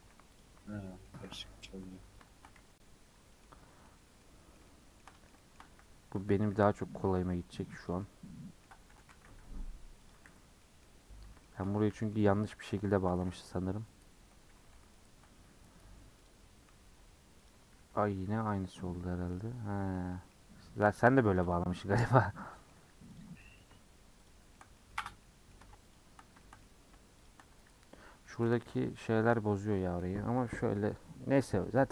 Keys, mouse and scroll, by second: 0.0 2, 0.4 alt+Left, 0.6 middle click, 1.4 g, 2.3 shift+Tab, 2.7 g, 3.4 middle click, 4.1 scroll down 1, 4.2-5.7 middle drag, 5.7 e, 8.0 middle click, 8.9 g, 10.3 f, 10.6-11.8 middle drag, 11.8 1, 11.9 middle click, 12.2 scroll up 1, 12.5 middle click, 12.8 3, 14.7 ;, 16.3 click, 16.8 1, 17.5 click, 18.3 g, 20.3 middle click, 21.1 3, 21.4 click, 22.5 middle click, 22.9 2, 23.2 click, 23.4 middle click, 24.3 shift+click, 24.5-25.9 shift+middle drag, 25.9 shift+click, 26.4 shift+middle click, 27.3 shift+click, 28.4 a, 30.1 u.